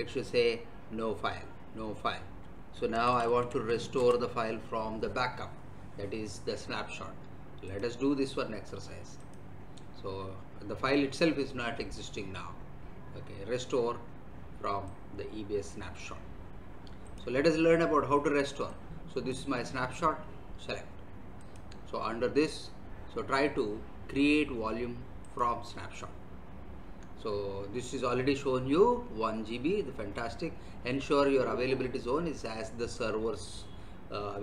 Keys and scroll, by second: 2.6-3.4 typing, 4.0 Return.